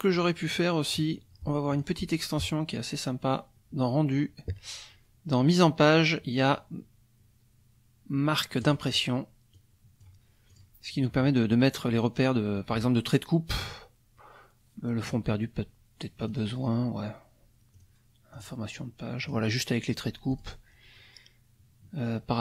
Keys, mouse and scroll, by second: 1.7 click, 8.6 click, 9.5 click, 10.5 click, 15.0 click, 16.2 click, 17.7 click, 18.3 click, 19.2 click, 20.3 click.